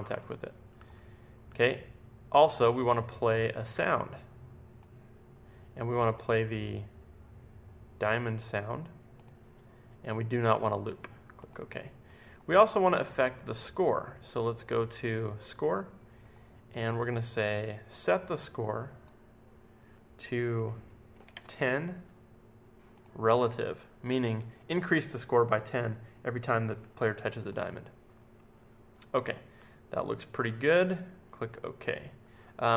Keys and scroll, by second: 20.9-21.8 typing.